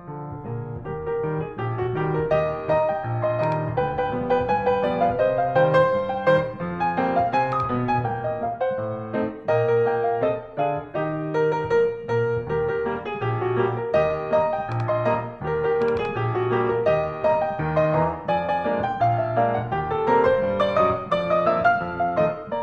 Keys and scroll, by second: 1.6 alt+f, 5.0 alt+super+Up, 8.6 BackSpace, 19.2 Return.